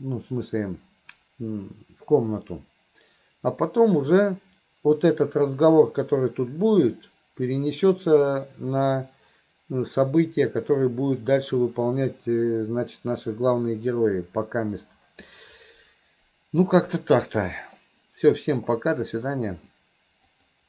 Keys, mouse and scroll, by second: 20.4 click.